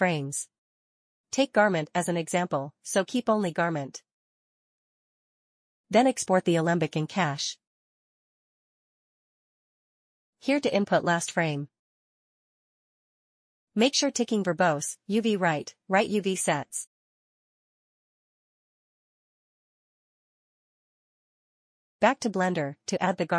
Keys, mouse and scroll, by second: 0.4 click, 2.4 Delete, 4.0 click, 6.0 click, 8.7 click, 10.4 click, 12.1 scroll down 1, 17.4 click, 18.8 click, 21.4 click, 22.5 click.